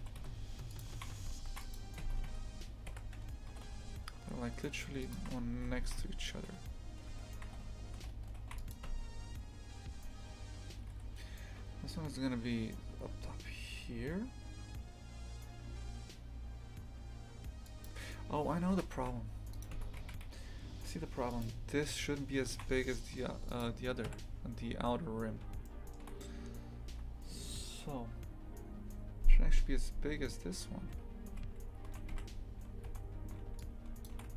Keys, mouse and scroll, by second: 0.0 g, 0.9 shift+f, 2.0 Tab, 2.2 a, 3.5 g, 5.2 shift+f, 8.8 Tab, 10.7 g, 18.7 Delete, 19.5 right click, 19.7 Tab, 20.0 shift+f, 22.5 shift+f, 24.0 KP_3, 24.6 scroll up 1, 25.6 shift+middle click, 26.1-26.4 scroll up 3, 31.2 2, 31.8 a, 32.1 1, 32.9 z, 34.0 shift+click.